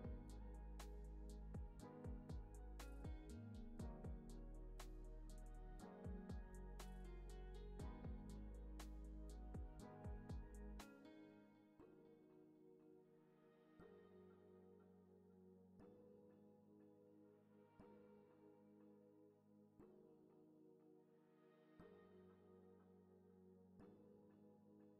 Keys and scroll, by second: 4.4 x, 4.9 super+s, 17.9 x.